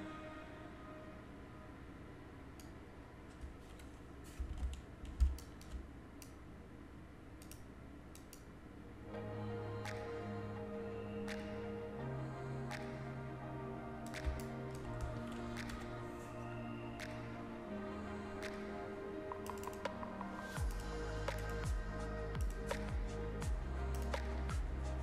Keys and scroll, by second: 5.2 ctrl+space, 14.2 ctrl+space.